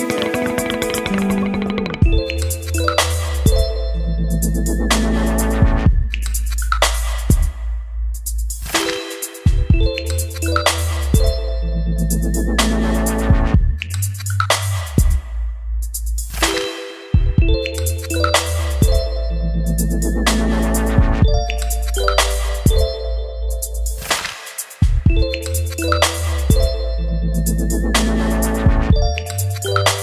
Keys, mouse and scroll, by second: 0.3-2.2 typing, 4.7-9.6 typing, 7.8 Return, 10.0 Return, 11.1-16.5 typing, 17.6 Right, 17.8-22.9 typing, 20.5 ctrl+space, 23.5 ctrl+s, 24.5-30.0 drag.